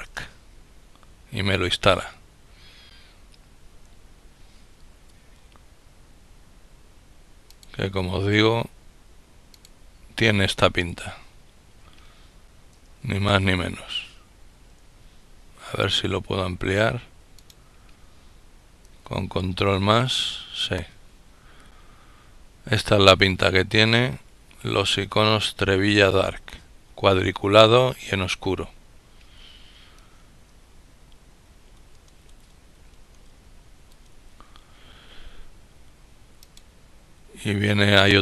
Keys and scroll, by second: 12.7 ctrl+,, 18.8 ctrl++, 31.8 ctrl+-, 32.6 ctrl+-.